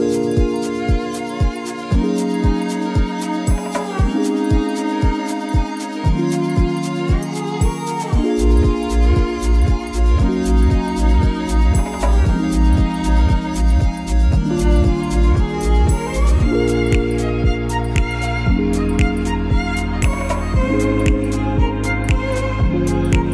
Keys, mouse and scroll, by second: 0.0 scroll up 6, 0.1 shift+middle click, 0.1 Tab, 0.2 Tab, 0.5 click, 1.0 scroll up 1, 1.0 scroll down 1, 1.5 click, 1.9 click, 2.0-2.5 scroll down 5, 2.4 middle click, 2.8 click, 2.8 scroll up 4, 3.0 middle click, 3.0 s, 3.4 ctrl+a, 3.5 scroll up 1, 3.6 g, 3.9 g, 4.1 middle click, 4.4 click, 4.5 middle click, 4.5 scroll down 4, 5.4 shift+middle click, 5.5-5.8 scroll up 5, 5.6 click, 5.8 shift+middle click, 6.2 s, 6.5 g, 6.9 right click, 7.1 g, 7.4 middle click, 7.6 ctrl+s, 7.9 middle click, 8.1 ctrl+a, 8.2 middle click, 8.5 scroll down 2, 8.7 Tab, 8.7 shift+middle click, 8.7-11.2 typing, 8.9 click, 8.9 scroll up 3, 9.9 ctrl+z, 11.7 middle click, 11.9-12.4 scroll down 7, 12.0 Tab, 12.1 click, 12.1 middle click, 12.4 middle click, 12.5-13.2 scroll up 10, 12.8 Tab, 12.8 middle click, 13.2 shift+middle click, 13.4 shift+middle click, 13.6 middle click, 14.0-16.5 typing, 14.2 Tab, 14.3 click, 14.6 click, 16.0 scroll down 3, 16.3 ctrl+a, 17.0 middle click, 17.3 middle click, 17.3 scroll down 2, 17.9 scroll up 2, 18.0 shift+middle click, 18.3 middle click, 18.5 alt+middle click, 18.7 shift+d, 18.8 g, 19.2 middle click, 19.4 click, 19.4-19.8 scroll down 5, 19.5 shift+middle click, 19.8 middle click, 20.2-20.9 scroll up 5, 20.6 shift+middle click, 20.7 middle click, 20.9 shift+middle click, 20.9 scroll down 2, 21.1 shift+middle click, 21.2 scroll up 2, 21.3 click, 21.5-23.3 typing, 21.8 alt+middle click, 22.7 Tab, 22.9 click.